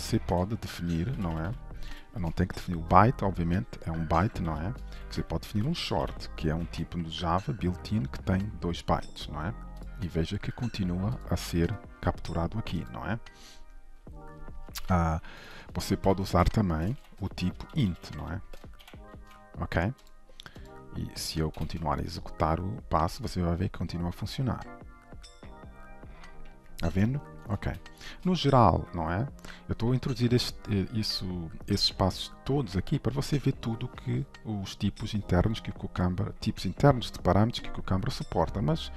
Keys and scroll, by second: 2.7 ctrl+/, 6.4 ctrl+s, 11.4 ctrl+b, 17.1 ctrl+/, 19.2 ctrl+s, 21.5 shift+F10.